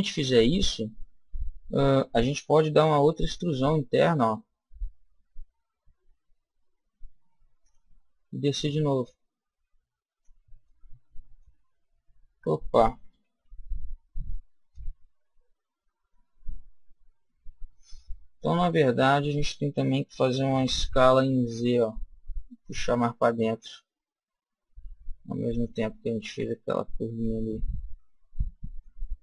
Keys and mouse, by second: 0.5-2.2 middle drag, 2.8 e, 7.6-10.4 drag, 10.5-12.4 middle drag, 13.1 ctrl+z, 13.6 ctrl+z, 16.0 middle click, 20.5 s, 25.6 click, 26.2 middle click, 27.4-29.2 middle drag.